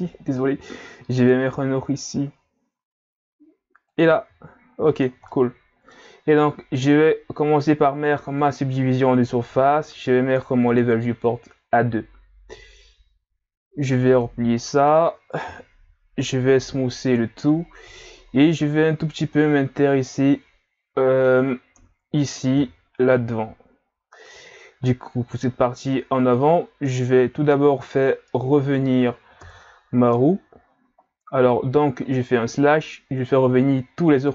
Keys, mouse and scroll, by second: 4.3 z, 4.9 Tab, 5.3-6.8 middle drag, 6.8 click, 10.7 click, 14.1 click, 14.6 middle click, 15.5 KP_3, 16.6 w, 18.0-18.6 scroll up 1, 18.6 Tab, 19.2-21.7 middle drag, 21.7 KP_Enter, 22.5 KP_3, 27.5-28.3 scroll down 2, 28.3-29.4 scroll down 1, 29.4 KP_Divide, 31.0-32.2 scroll up 1.